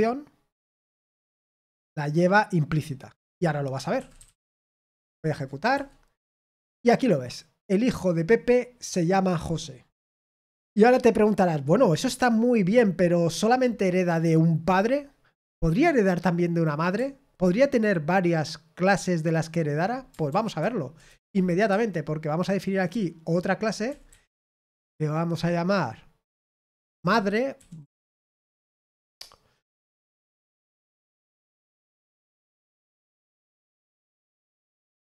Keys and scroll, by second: 3.9-4.9 typing, 5.1 ctrl+p, 5.7 Return, 20.2 ctrl+p, 20.6 ctrl+p, 21.0 Return, 21.6-24.3 typing, 27.3-28.6 typing.